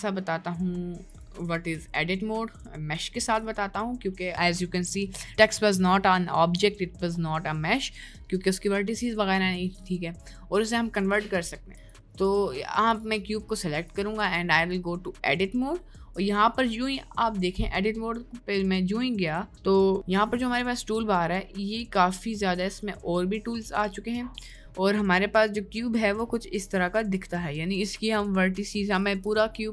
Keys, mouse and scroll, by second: 25.0 middle click, 26.1 middle click, 26.9 middle click, 29.4 click.